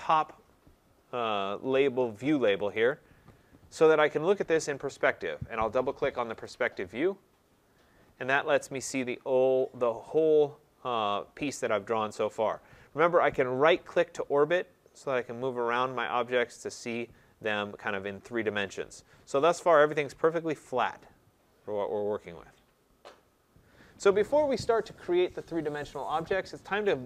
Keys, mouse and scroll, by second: 2.7 click, 2.9 click, 6.4 click, 6.7 click, 7.4-8.0 scroll, 9.1-10.2 scroll, 10.2-11.8 scroll, 17.4 right click, 17.7 middle click, 17.8 middle click, 18.2 middle click, 18.2 middle click, 18.3-18.6 scroll, 20.6 right click, 20.9-21.4 scroll, 21.4 middle click, 21.6-22.4 scroll, 22.4 middle click, 22.5-23.3 scroll, 23.4-23.8 scroll.